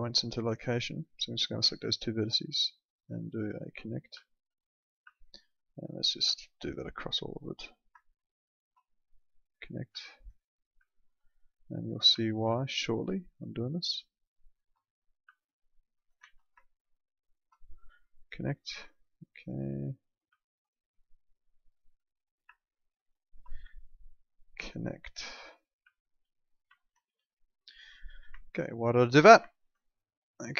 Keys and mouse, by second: 2.2 click, 4.2 alt+middle click, 5.1 alt+middle click, 6.4 alt+middle click, 7.4 click, 8.5 ctrl+click, 10.0 alt+middle click, 10.9 alt+middle click, 12.2 alt+middle click, 13.2 click, 14.5 ctrl+click, 15.3 alt+middle click, 16.2 ctrl+z, 17.2 ctrl+click, 18.2 click, 18.5 middle click, 20.4 alt+middle click, 21.8 click, 23.2 ctrl+click, 25.9 alt+middle click, 26.8 alt+middle click, 27.0 w, 27.9 click, 28.4 alt+middle click, 29.5 alt+middle click, 30.2 click.